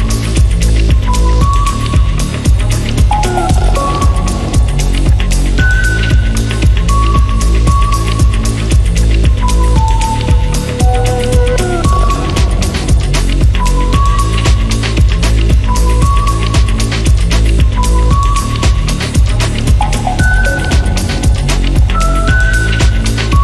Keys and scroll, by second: 2.8-7.4 typing, 8.9-13.0 typing, 14.0 Escape.